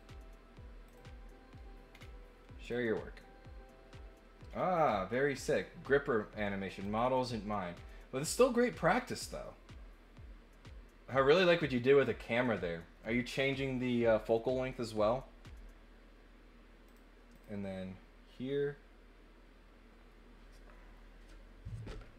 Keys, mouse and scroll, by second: 0.8 click, 1.9 scroll down 2, 2.6 click, 4.5 scroll up 2, 6.8 click, 16.8 click, 17.3 click.